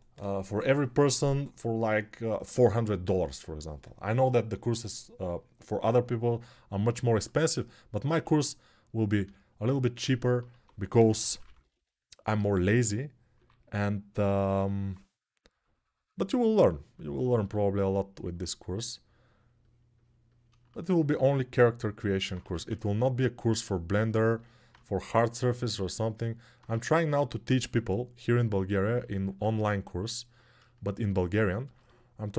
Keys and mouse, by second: 7.8-14.3 right drag, 8.0 1, 9.9 alt+q, 10.3-11.5 typing, 13.1 3, 14.3-32.3 alt+drag, 22.2 1, 27.4 2.